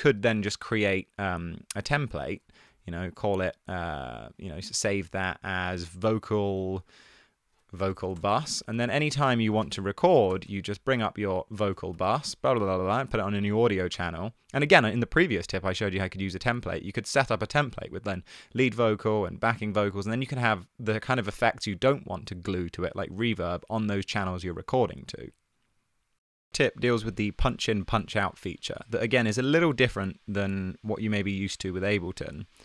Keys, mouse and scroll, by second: 0.5 click, 2.5 super+a, 2.8 super+g, 7.8-10.5 typing, 12.0-12.5 typing, 14.1 BackSpace.